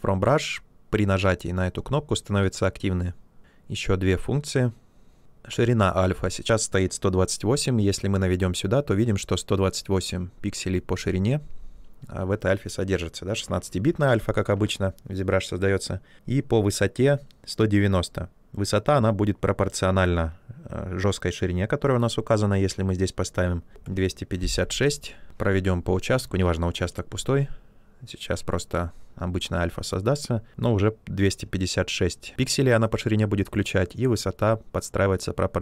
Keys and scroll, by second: 23.5-24.2 typing.